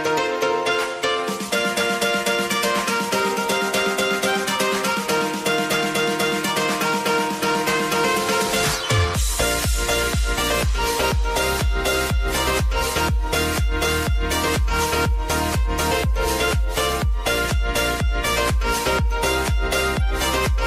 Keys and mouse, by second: 0.8 click, 1.8 u, 2.3 space, 3.8 click, 4.5 j, 6.1 click, 7.8 Return, 9.2 click, 9.7 Return, 10.2 click, 10.6 k, 11.3-12.6 drag, 13.1 Return, 16.2 click, 17.0 F9, 17.7-20.6 drag.